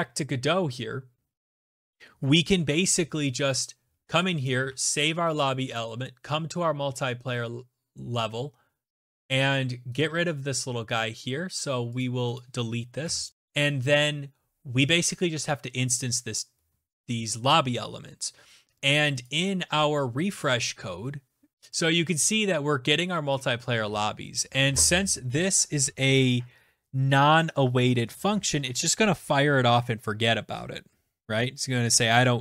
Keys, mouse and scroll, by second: 2.2 click, 2.4 ctrl+s, 3.1 click, 3.5 click, 5.2 right click, 7.0 click, 7.7 right click, 9.7 click, 10.1 click, 10.9 Delete, 11.3 Return, 12.5 click, 15.7 click, 21.2 click.